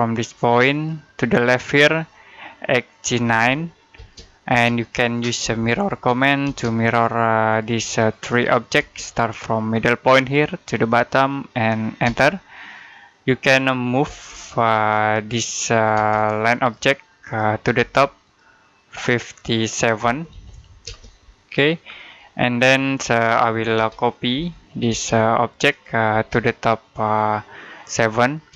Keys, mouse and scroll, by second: 0.5 click, 2.9-3.8 typing, 5.3-6.3 typing, 6.7 click, 8.6 space, 10.0 click, 11.9 space, 13.9 m, 15.8 space, 16.4 click, 17.6 space, 18.1 click, 19.9-20.7 typing, 21.6-22.0 scroll down 1, 22.0 middle click, 22.6-23.6 scroll up 1, 23.6-24.7 typing, 25.2 click, 25.9 space, 26.1 click, 27.8-28.3 typing.